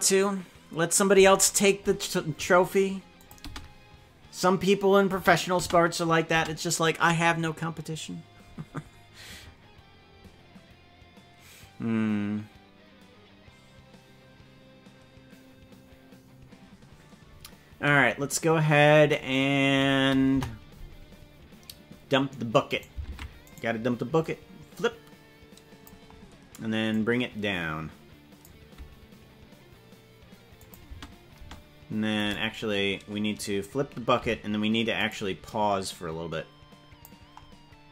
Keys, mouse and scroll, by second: 3.1 click, 3.4 space, 5.1 space, 5.7 space, 6.3 space, 20.2 KP_0, 22.8 right click, 23.2 ctrl+Tab, 23.6 right click, 24.2-25.8 drag, 26.9-28.4 drag, 30.5 click, 30.8 space, 31.4 space, 32.2 right click, 34.2 g, 35.4-37.0 drag.